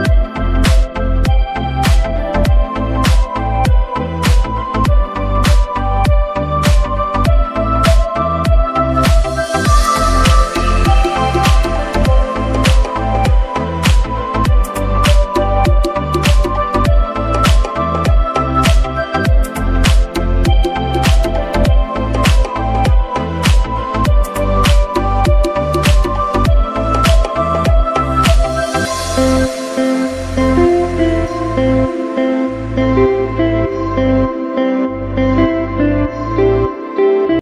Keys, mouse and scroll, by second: 0.3 click, 6.8 Tab, 9.4 click, 10.9 click, 13.7 scroll up 1, 16.4 click, 17.3 scroll up 1, 18.2 click, 18.7 scroll up 1, 20.0 click, 20.7 scroll down 1.